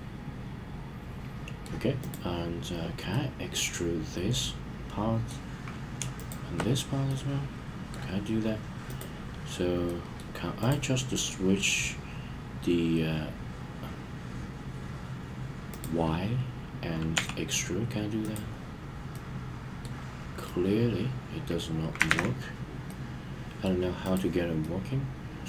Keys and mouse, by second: 3.1-5.3 middle drag, 6.1 shift+click, 7.1-7.9 middle drag, 9.8-10.2 middle drag, 10.6 click, 15.7 click, 17.1 e, 18.2 click, 19.1-19.8 middle drag, 20.4-21.6 middle drag, 22.1 super+z, 22.8-23.7 middle drag, 24.6-25.4 middle drag.